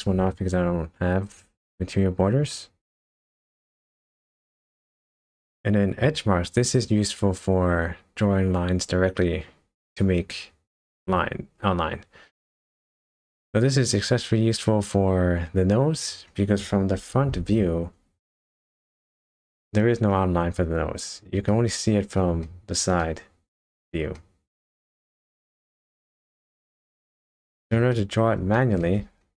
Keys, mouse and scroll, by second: 3.0 click, 4.4 shift+middle click, 5.0 middle click, 8.3 scroll up 1, 9.2-10.9 scroll down 2, 12.4 middle click, 13.3 scroll up 1, 14.7-15.4 scroll down 1, 17.3 KP_0, 18.6 shift+middle click, 21.5 middle click, 22.4 shift+middle click, 23.0 middle click, 24.2 middle click, 27.1 shift+middle click, 27.9 middle click, 28.5 shift+middle click, 29.0 scroll up 1.